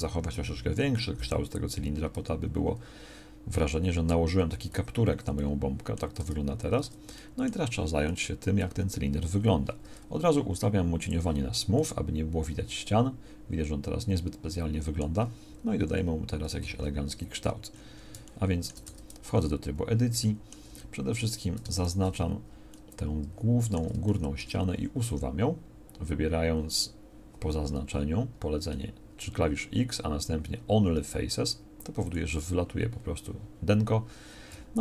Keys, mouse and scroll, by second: 3.9 Tab, 4.7 z, 6.2 Tab, 6.8 Tab, 9.8 Tab, 15.7 KP_1, 18.8 Tab, 21.3 a, 23.0 middle click, 24.7 x, 28.3 x, 34.5 a.